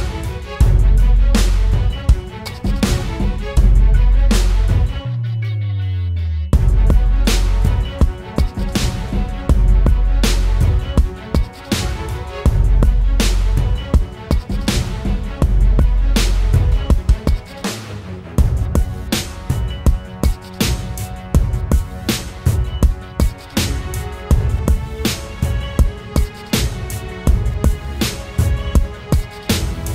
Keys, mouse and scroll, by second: 26.9 double click, 28.8 ].